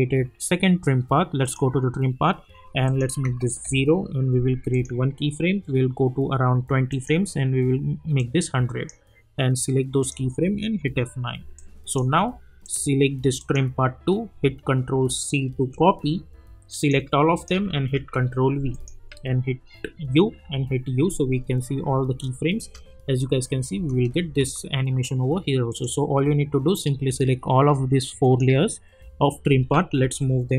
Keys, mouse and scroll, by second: 0.1 scroll down 1, 1.4 click, 3.6 Return, 4.7 click, 6.9-10.7 drag, 10.7 F9, 11.5 click, 15.5 ctrl+c, 16.0-16.5 scroll down 2, 16.8 click, 17.3 shift+click, 17.9 ctrl+v, 18.7 click, 19.1 u, 20.3 u, 21.0 scroll down 1, 22.1 space, 25.7 click, 28.2 shift+click, 30.0 [.